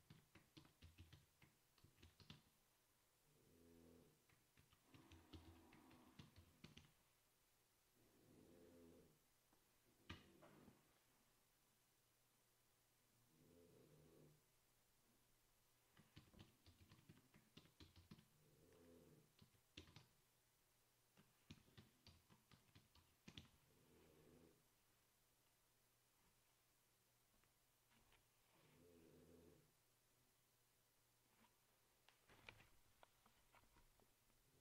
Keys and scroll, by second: 0.0-3.0 typing, 4.5-7.4 typing, 10.0-10.8 typing, 16.1-24.1 typing.